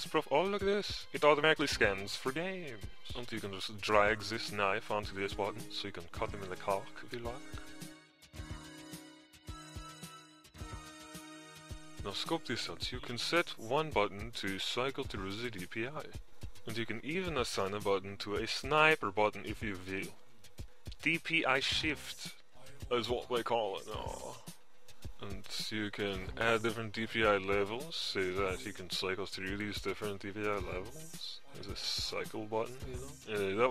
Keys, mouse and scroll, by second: 2.4 Insert, 2.8-9.2 drag, 21.5 Insert, 21.7-26.5 drag, 27.3 shift+x, 28.8 Insert, 30.2-31.4 drag.